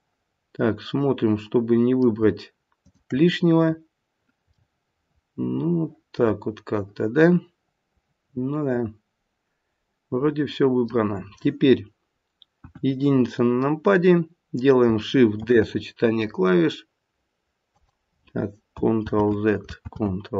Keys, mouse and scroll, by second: 2.8 shift+click, 3.6-4.6 scroll down 2, 4.6 middle click, 12.5 KP_1, 13.0-13.5 scroll down 1, 15.4-15.7 scroll down 2, 15.4 shift+d, 18.9 ctrl+z, 19.7 ctrl+z.